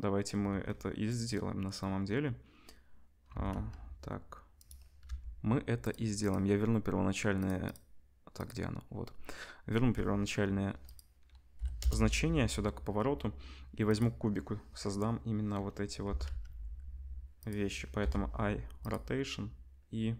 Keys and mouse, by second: 3.3 r, 5.0 n, 5.9-6.2 middle drag, 6.2 click, 6.3-7.3 middle drag, 7.3 click, 7.5 middle click, 8.3 click, 8.4-10.8 middle drag, 10.8-13.9 drag, 13.9-20.1 middle drag, 16.0 r, 18.0 i.